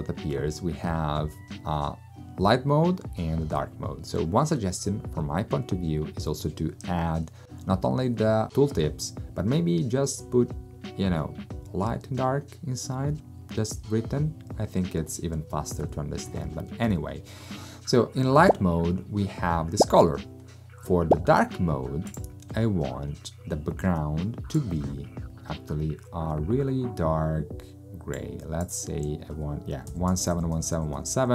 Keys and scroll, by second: 29.7-31.3 typing.